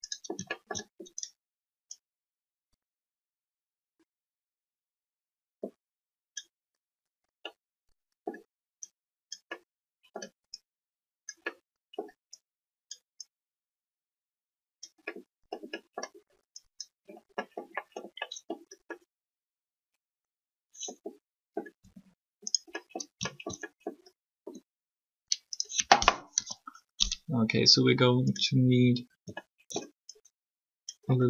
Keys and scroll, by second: 21.8 r, 24.3 alt+r, 26.4 3.